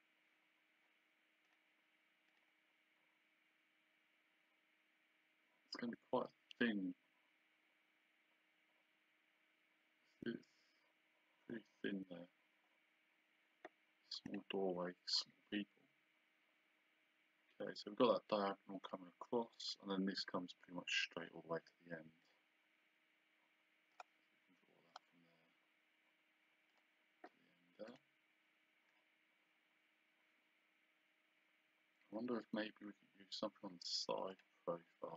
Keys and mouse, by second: 1.5 click, 14.3 click, 18.9 click, 22.2 click, 24.0 click, 26.7 click, 27.9 click, 34.3 click.